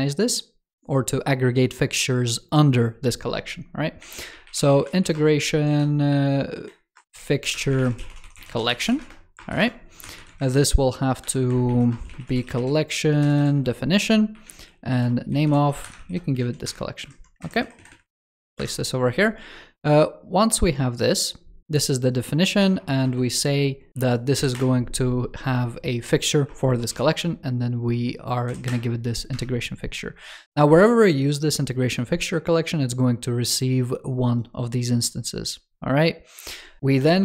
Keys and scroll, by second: 10.3 super+Right, 15.8 ctrl+s, 16.3 super+c, 17.3 super+Right, 18.0 super+v, 18.2 super+s.